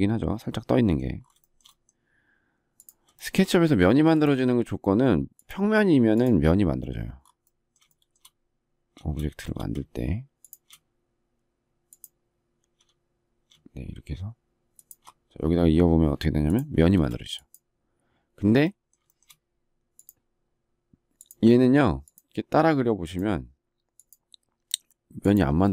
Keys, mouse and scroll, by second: 1.3 shift+middle click, 3.1 shift+middle click, 3.3 shift+double middle click, 7.8 shift+middle click, 10.4 shift+click, 14.7 shift+click, 16.9 space, 19.0 shift+middle click.